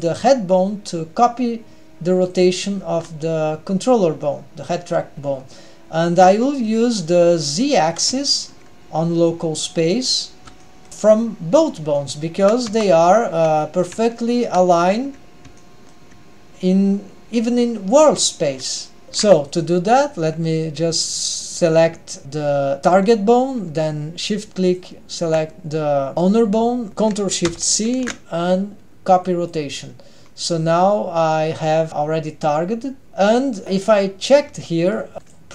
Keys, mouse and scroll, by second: 2.3 click, 2.9 r, 6.4-6.8 middle drag, 7.0-8.0 scroll up 1, 8.2 shift+middle click, 9.4-10.0 scroll up 1, 10.0-10.6 scroll down 1, 10.6 shift+middle click, 12.0-12.3 shift+middle drag, 12.7 Tab, 13.2-13.6 scroll down 1, 13.6 shift+middle click, 14.0-14.7 scroll up 2, 14.7 shift+middle click, 15.5 shift+middle click, 19.0 ctrl+alt+shift+super+r, 19.5 click, 21.7 click, 24.7 shift+click, 29.5 ctrl+shift+c, 30.2 scroll up 1, 34.2 drag, 35.1 middle click, 35.1-35.5 scroll down 1, 35.1 g.